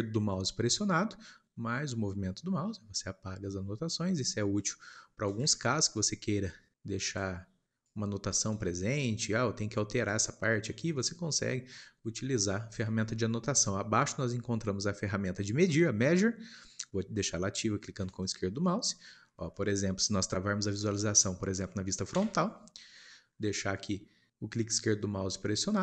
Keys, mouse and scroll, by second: 5.6-7.3 shift+middle drag, 7.3-18.6 drag, 18.6-22.1 middle drag, 22.1 KP_1, 22.9-23.4 scroll up 1, 23.4 shift+middle click, 23.6-24.1 scroll up 1, 24.1-25.8 scroll up 1.